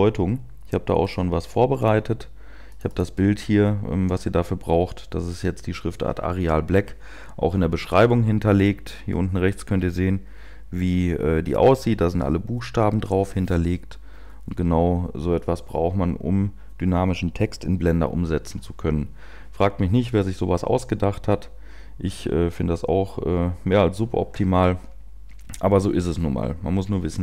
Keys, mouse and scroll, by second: 3.6 click, 25.8 scroll down 2.